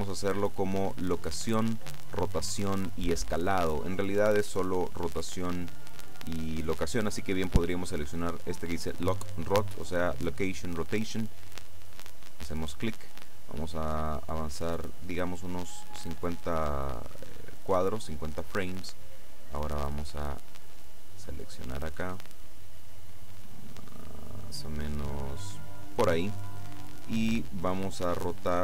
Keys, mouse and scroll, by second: 11.8 click, 15.8 click, 19.8-26.5 drag.